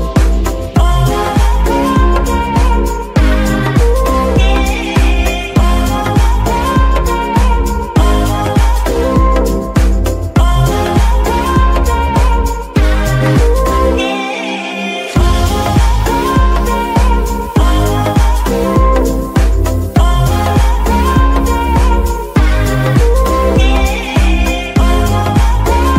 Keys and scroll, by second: 2.4 KP_3, 3.3 ctrl+r, 6.6 ctrl+r, 7.8 x, 13.3 KP_3, 18.8-19.4 typing, 21.0-22.5 typing, 23.6 b, 24.1 a, 24.7 c, 25.2 k.